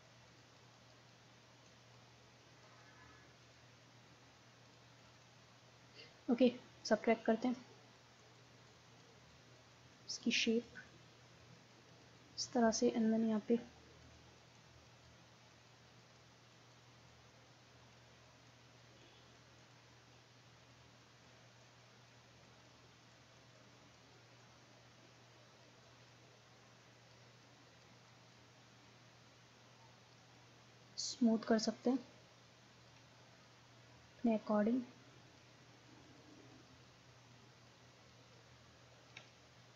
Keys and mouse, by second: 6.9-13.9 middle drag, 14.1-24.7 drag, 24.7 middle click, 25.0-33.9 drag, 33.9 middle click, 34.3-39.7 drag.